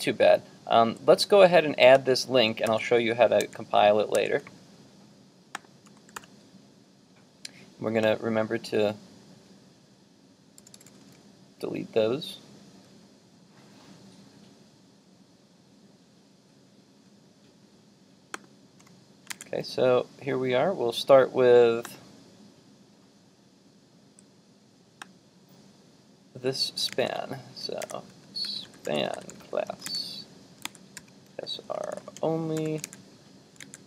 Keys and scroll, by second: 2.7 super+c, 6.2 super+v, 19.4 super+Tab, 22.4 super+Tab, 26.9 super+Tab, 29.9 super+Tab, 30.7 super+Tab.